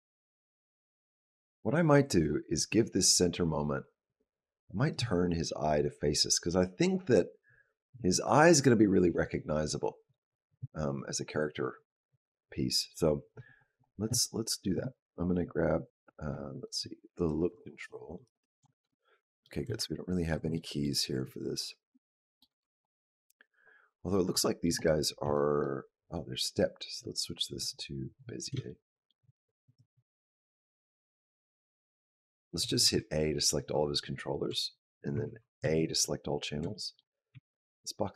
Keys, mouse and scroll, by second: 9.9 click, 16.5 click, 17.0 click, 17.5 shift+click, 18.1 shift+click, 19.2 shift+middle click, 19.6 ctrl+middle click, 20.3 shift+middle click, 21.9 shift+middle click, 22.4 b, 24.2 shift+middle click, 24.6 click, 25.0 b, 25.8 right click, 28.5 shift+middle click, 29.5 click, 30.3 click, 32.7 a, 34.3 b, 35.4 a, 36.0-36.6 scroll down 3, 36.6 shift+middle click, 37.1 b.